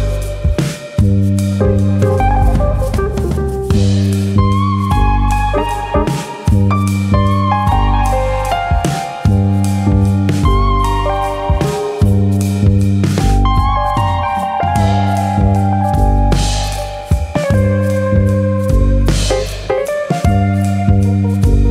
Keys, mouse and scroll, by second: 0.8 click, 1.6 click, 2.3 click, 2.5 middle click, 3.2 click, 4.3 middle click, 4.6 shift+middle click, 4.9 middle click, 5.9 click, 6.2 middle click, 6.7 click, 7.9 middle click, 8.9 g, 9.6 click, 9.9 middle click, 10.8 middle click, 12.3-13.0 scroll down 2, 12.5 middle click, 13.0 middle click, 13.3-13.8 scroll up 2, 13.8 alt+click, 14.0 middle click, 14.7 click, 15.4 middle click, 16.2 click, 16.5 click, 16.8 middle click, 17.5 g, 18.8 click, 19.3 click, 19.5 middle click, 21.4 click, 21.6 middle click.